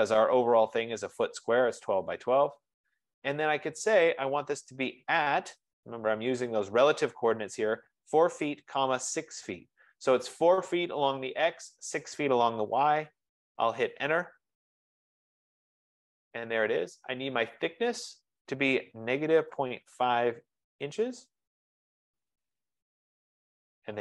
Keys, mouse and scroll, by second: 2.3 typing, 5.1 @, 8.0-10.1 typing, 14.2 Return, 19.2 click, 19.5-21.0 typing, 22.9 Return.